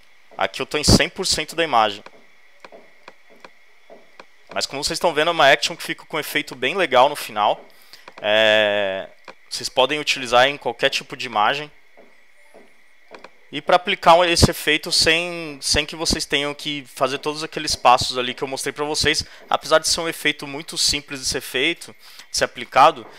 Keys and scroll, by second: 1.7 space.